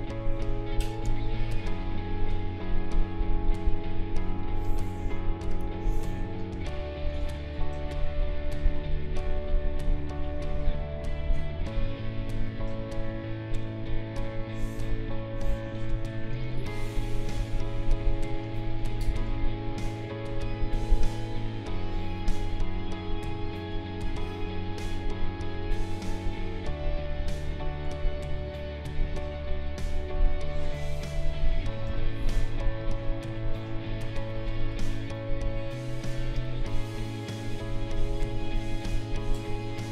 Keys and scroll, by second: 1.0 space, 6.5 space, 31.8 b, 32.6 space.